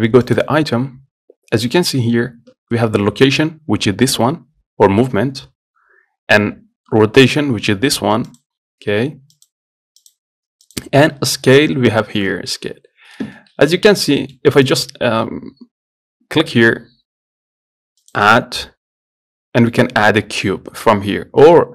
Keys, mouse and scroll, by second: 0.5 click, 8.6-13.7 drag, 13.7 scroll up 1, 14.1 scroll down 1, 14.5 shift+middle click, 14.9 click, 18.2-21.0 drag.